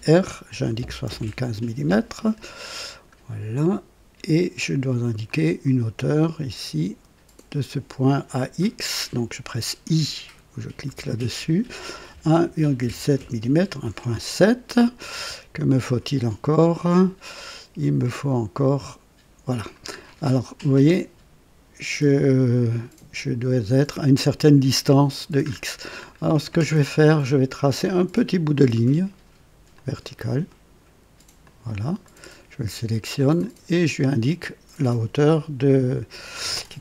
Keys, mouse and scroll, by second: 0.5 KP_7, 0.8 KP_5, 1.0 Return, 2.4-2.7 scroll down 1, 2.9 right click, 5.3-6.6 drag, 8.0 click, 10.8 i, 12.1-13.6 typing, 15.0-15.5 scroll up 1, 18.0-19.9 drag, 18.9-19.6 typing, 20.0-20.6 scroll down 1, 25.4-26.2 scroll up 2, 27.9 click, 29.7 click, 31.4 click, 32.0 right click, 33.4 click.